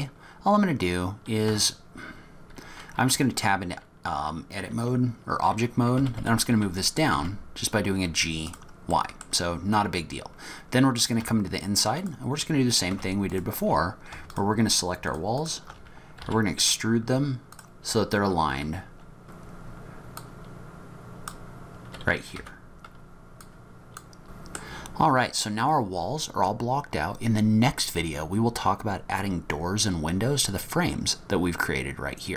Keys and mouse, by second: 1.5 Tab, 6.0 g, 9.0 middle click, 10.0-11.2 middle drag, 11.2 Tab, 12.0 click, 12.9 3, 15.0 shift+click, 15.4 click, 16.2 e, 19.3 click, 19.4-23.6 typing, 19.6 Tab, 19.7 Tab, 19.7 shift+click, 20.0 shift+click, 21.5 click, 21.9 ctrl+z, 22.0 click, 22.1 click, 22.3 Tab, 22.4 click, 23.1 click, 23.2 click, 23.4 ctrl+z, 23.4 click, 23.6 click, 23.7 Tab, 24.3 click.